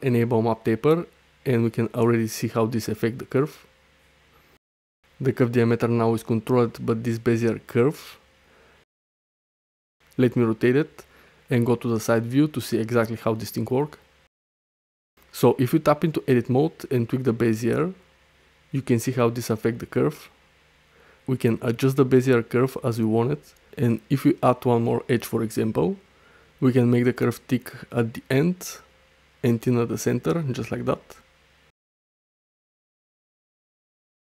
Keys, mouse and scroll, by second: 0.7 click, 1.5 middle click, 2.4-4.8 drag, 4.9 space, 6.3 middle click, 9.1-10.9 typing, 11.1 Return, 12.7 shift+middle click, 13.4 space, 14.2 space, 15.0 Tab, 15.2 click, 15.8 click, 16.1 g, 17.7 click, 18.3 shift+middle click, 18.7 click, 20.2 click, 20.7 shift+click, 21.2-21.6 right drag, 22.9 click, 23.4 right click, 24.3 click, 24.6 g, 24.9 click, 25.7 click, 26.1 g, 26.8 click, 27.1 space, 28.4 space, 28.6 click, 29.0 g, 29.7 Tab, 29.9 space, 30.9-31.5 middle drag, 31.8 shift+middle drag, 32.3 click, 33.3 space, 33.6 ctrl+z, 33.8 ctrl+z, 33.9 ctrl+z, 34.0 ctrl+z.